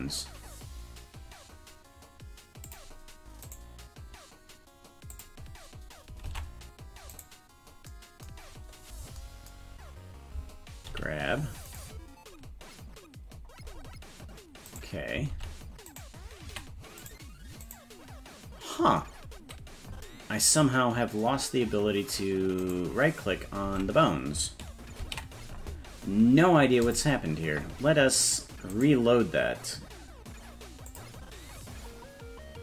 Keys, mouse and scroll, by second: 2.6 click, 3.4 right click, 5.1 click, 6.3 ctrl+Tab, 7.2 right click, 8.4-9.5 scroll down 8, 10.9 g, 12.3 scroll down 1, 13.3-14.3 scroll up 7, 14.7 right click, 15.3 ctrl+Tab, 15.9 right click, 16.5 a, 17.0 right click, 19.0-20.0 scroll up 1, 20.0-20.4 scroll up 4, 22.6 right click, 23.7 ctrl+Tab, 25.2 ctrl+s.